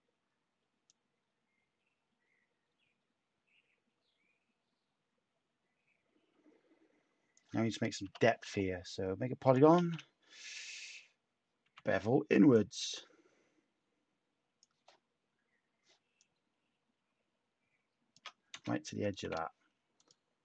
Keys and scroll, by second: 8.0 p, 9.7 shift+a, 11.6 b, 18.6 /.